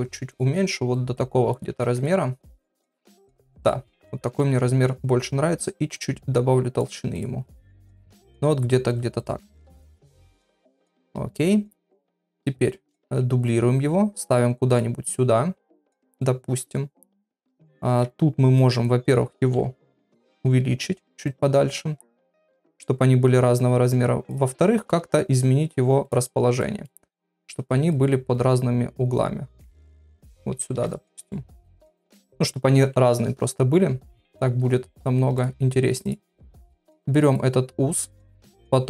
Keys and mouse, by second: 1.0 click, 1.8 ctrl+a, 3.6 click, 3.9 middle click, 6.0 shift+click, 7.2 click, 7.6 middle click, 10.6 KP_1, 12.1 KP_3, 13.0 shift+d, 15.1-16.2 middle drag, 17.9 Tab, 18.6 click, 19.5 KP_1, 20.5 g, 22.3 click, 22.5 g, 24.9 g, 26.6 middle click, 27.9-30.6 drag, 30.7 Tab, 30.8 click, 31.3-32.3 middle drag, 32.8 KP_1, 34.2 KP_3, 35.4 click, 36.1 click, 36.6 shift+d, 38.2 r.